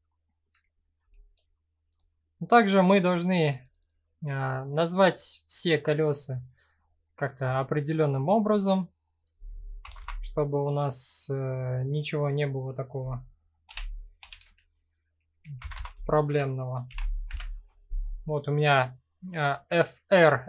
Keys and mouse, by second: 0.7 shift+middle drag, 1.5 click, 3.2 click, 3.4-18.1 drag, 9.5 BackSpace, 15.3 BackSpace.